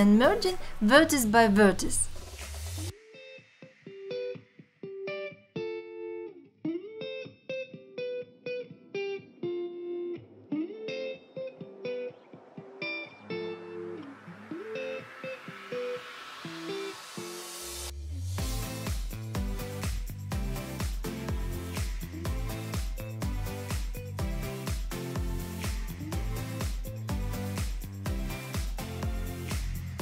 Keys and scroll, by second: 0.9 shift+x, 3.1 shift+x, 5.4 g, 7.1 g, 7.6 alt+z, 8.5 shift+x, 9.1 alt+z, 10.1 alt+z, 10.4 2, 11.4 3, 12.0 x, 12.4 alt+z, 13.3 1, 13.7 shift+x, 14.7 g, 16.4 g, 17.1 shift+x, 17.9 ctrl+z, 18.1 shift+x, 20.1 shift+x, 21.1 shift+x, 21.9 shift+x, 23.4 alt+z, 24.2-27.4 typing, 28.0 alt+z, 29.5 shift+x.